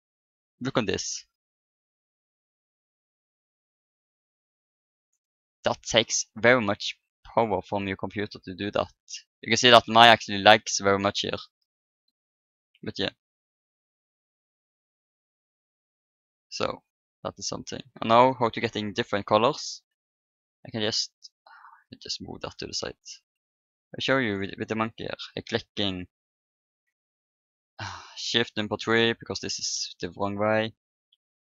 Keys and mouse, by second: 2.3-5.8 drag, 5.8-8.4 middle drag, 11.6-13.7 middle drag, 13.5-15.3 right drag, 15.1 click, 16.1 click, 17.0-18.5 middle drag, 18.5 KP_1, 20.2 middle click, 21.7-22.8 drag, 21.9 right click, 23.1 Tab, 23.5 click, 23.6 right click, 24.0 a, 24.8 click, 25.2 KP_1, 26.9 KP_3, 27.8 ctrl+KP_3.